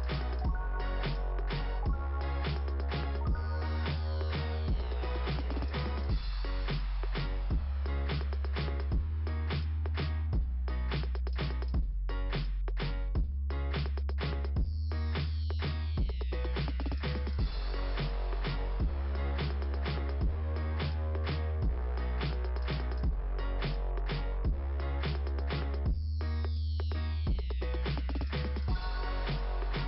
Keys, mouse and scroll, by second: 1.2 click, 2.2 click, 3.8 click, 5.7 click, 9.2 right click, 10.9 click, 15.5 click, 18.6 scroll up 2, 21.4 scroll down 2, 22.3 click, 25.7 click, 26.3 click.